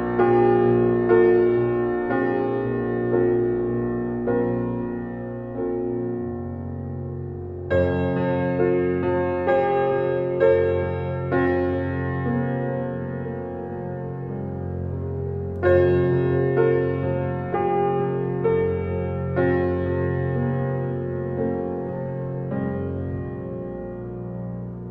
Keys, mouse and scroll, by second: 0.3 alt+z, 0.6 click, 1.2 alt+z, 2.1 r, 9.8 click, 10.4 g, 12.6-13.5 drag, 14.5-15.8 drag, 15.8 alt+middle click, 16.7-18.2 drag, 18.7-19.2 scroll down 5, 19.2-19.9 middle drag, 19.9-20.3 scroll up 6, 20.3 alt+click, 20.7-21.6 right drag, 21.6 shift+click, 22.4 alt+z, 22.8 shift+drag, 23.5 scroll down 2, 23.7 alt+middle click, 24.3-24.9 shift+middle drag.